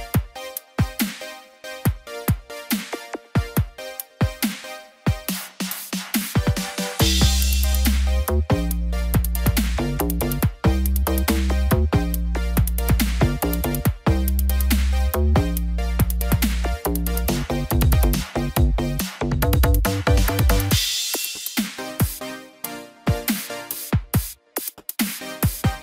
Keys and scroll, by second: 2.2 ctrl+-, 2.8 ctrl+0, 4.2 ctrl+t, 18.7 ctrl+j.